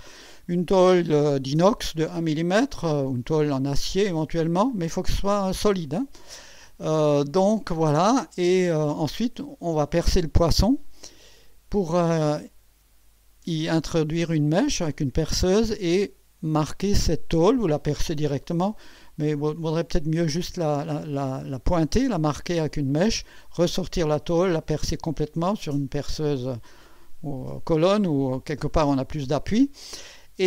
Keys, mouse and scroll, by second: 4.7-9.1 drag.